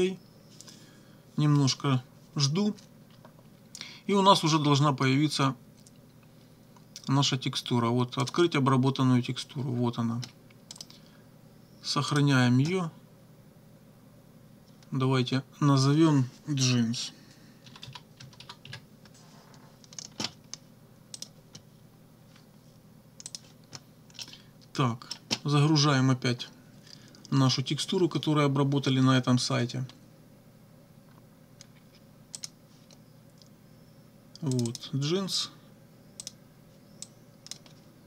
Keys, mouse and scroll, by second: 8.2 click, 10.8 click, 12.1 click, 17.4-19.1 typing, 21.2 click, 23.3 click, 24.2-25.3 drag, 32.4 click, 34.6 click, 36.2 click, 37.0 click.